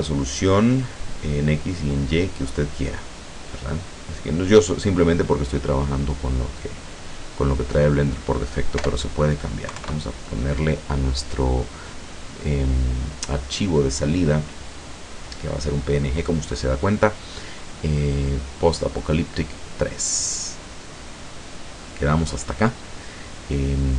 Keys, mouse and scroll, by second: 7.4 click, 7.7 click, 8.8 BackSpace, 9.7 KP_3, 9.8 KP_Enter, 13.6 click, 14.4-14.7 scroll down 1.